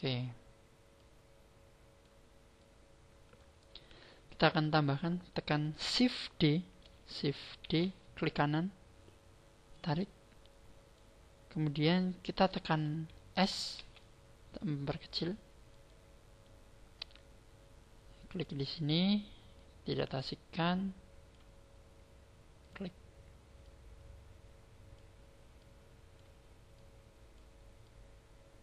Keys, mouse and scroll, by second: 0.9 click, 2.6 click, 7.6 shift+d, 8.4 right click, 9.8 click, 13.8 s, 15.8 click, 18.2 click, 19.5 click, 22.6 click, 23.6 click, 25.4 click, 26.7 click, 27.8 click.